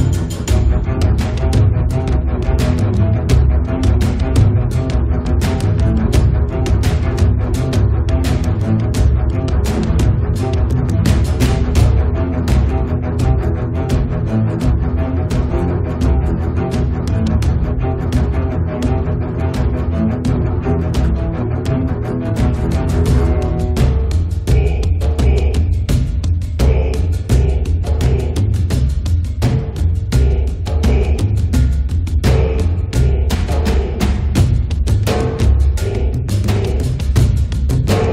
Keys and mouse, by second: 0.2-1.5 drag, 0.2 right click, 2.6-5.8 drag, 6.0 middle click, 6.4 right click, 7.4 click, 8.3 right click, 8.4-9.4 drag, 9.4-11.0 middle drag, 12.2-13.2 middle drag, 13.2 click, 13.8 click, 13.9 right click, 14.2 click, 14.2-15.7 middle drag, 15.7 click, 15.8 middle click, 16.2 click, 16.4-17.7 middle drag, 17.7 click, 17.9 click, 19.0 click, 20.1-21.6 middle drag, 21.6 8, 21.8 click, 23.8-24.9 drag, 25.0 click, 28.0-29.0 middle drag, 29.0-30.2 drag, 30.5-32.2 middle drag, 32.2 click, 33.3-35.4 middle drag, 35.4 ctrl+s, 36.6 click, 36.7 alt+F3, 37.0 middle click, 37.9 click.